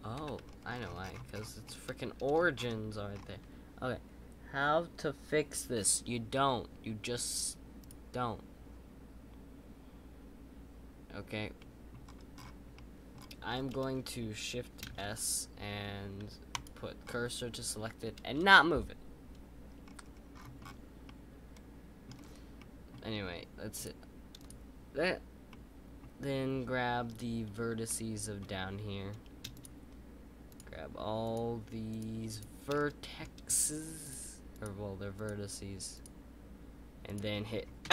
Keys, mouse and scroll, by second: 0.1 ctrl+z, 0.4-1.3 scroll down 9, 1.6-2.5 middle drag, 2.5-3.1 scroll up 2, 3.1-6.2 scroll up 9, 6.3-7.8 middle drag, 7.8-10.9 drag, 11.5-12.0 middle drag, 12.0-12.7 scroll down 4, 12.7-13.1 middle drag, 13.1-13.7 scroll down 7, 13.7-14.8 middle drag, 14.8 shift+s, 17.0-19.2 scroll up 3, 19.2-19.8 scroll up 1, 19.8-21.0 scroll up 16, 21.0-22.1 middle drag, 22.1-22.5 scroll up 2, 22.5-23.7 middle drag, 23.7-24.4 drag, 25.5-27.0 middle drag, 27.8-29.5 middle drag, 29.5 shift+click, 32.7-34.0 middle drag, 34.0 shift+click.